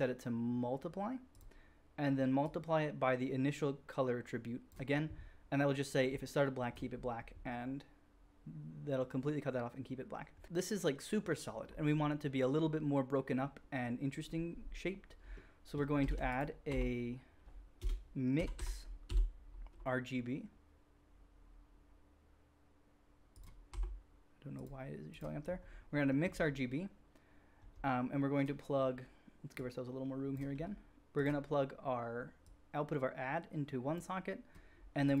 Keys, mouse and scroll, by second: 15.4-23.4 shift+drag, 16.1 shift+a, 23.4-25.4 middle drag, 23.6 q, 25.4 click, 25.5-29.5 middle drag, 29.5-31.2 drag, 30.4 g, 31.2-32.4 middle drag, 32.4-35.2 drag.